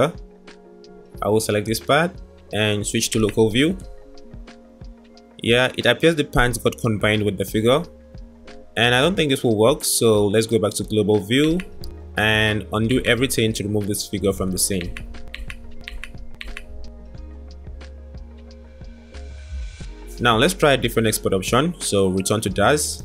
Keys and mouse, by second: 0.2-0.9 drag, 0.9 middle click, 1.0 click, 1.1 middle drag, 1.4-3.1 middle drag, 3.1 KP_Divide, 4.5 click, 5.8-6.2 drag, 9.3 click, 10.0-11.5 middle drag, 11.6 middle click, 13.9-14.2 drag, 14.5 ctrl+z, 14.9 ctrl+z, 15.4 ctrl+z, 15.6 ctrl+z, 16.1 ctrl+z, 16.5 ctrl+z, 16.7 ctrl+z, 17.8-18.2 drag.